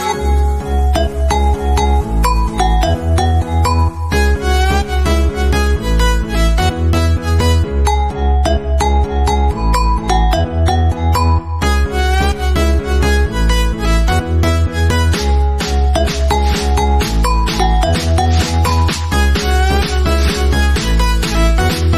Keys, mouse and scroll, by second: 3.4 click, 5.7 scroll up 1, 6.7-8.4 middle drag, 8.4-13.0 drag, 17.2 scroll down 1, 17.6-21.9 shift+middle drag.